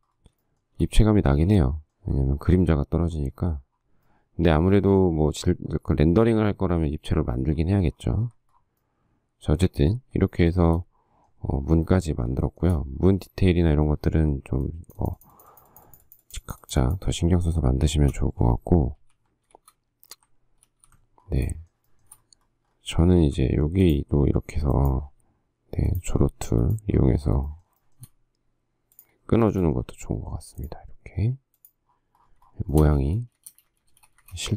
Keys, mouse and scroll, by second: 0.6 shift+middle click, 10.7 shift+middle click, 12.6 shift+middle click, 18.0 shift+a, 19.2 alt+t, 19.7 shift+z, 20.8 alt+f, 21.7 shift+middle click, 23.4 alt+x, 27.7 shift+middle click, 28.0 shift+middle click, 32.7 shift+scroll, 32.9 shift+middle click, 33.3 space, 33.4 Escape, 34.1 space, 34.4 Escape.